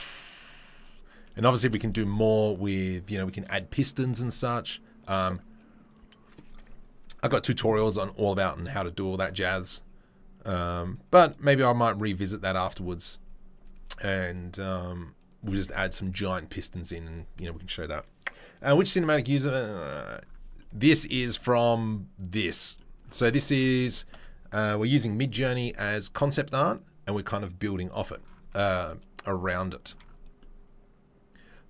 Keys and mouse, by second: 1.6 shift+space, 23.0 click, 23.3-23.8 right drag, 23.8 shift+middle drag, 24.1-29.3 drag, 29.3-29.8 shift+middle drag, 29.8-31.6 drag.